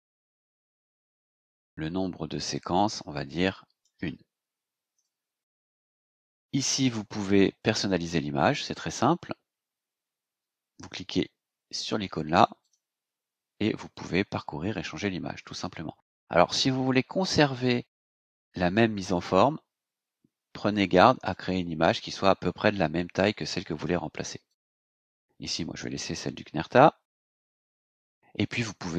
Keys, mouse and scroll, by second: 0.1 h, 2.5-4.0 drag, 4.9 KP_1, 7.1 click, 7.7-8.0 scroll down 2, 12.6 click, 20.8 click, 22.1 click, 23.4 click, 24.5 click, 26.2 click, 27.4 click.